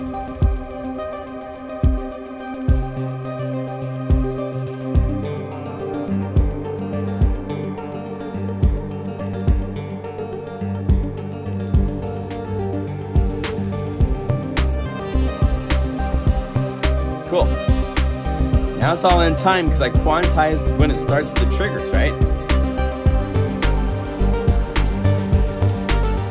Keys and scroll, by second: 4.7 super+Up, 5.9 super+Left.